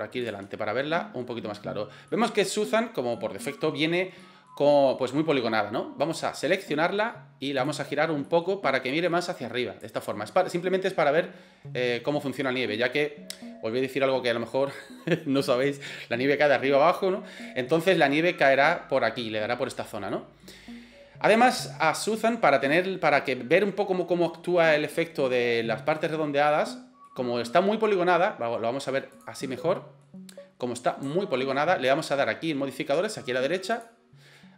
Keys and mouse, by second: 0.4 middle click, 2.1 middle click, 3.1 middle click, 4.2 middle click, 4.9 middle click, 6.0 right click, 6.5 middle click, 8.3 middle click, 9.1 right click, 10.0 middle click, 12.4 middle drag, 17.4 middle drag, 20.1-20.4 middle drag, 22.1-23.5 middle drag, 26.8 middle click, 27.5 middle click, 29.2 click, 29.5-30.0 middle drag, 31.1-31.4 shift+middle drag.